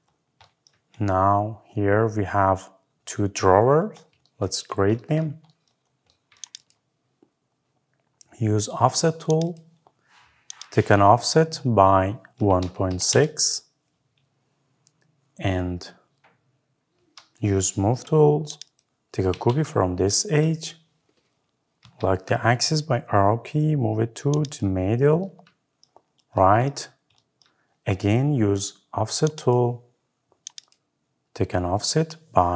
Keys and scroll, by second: 12.9 Return, 17.6 Escape, 21.7 Right.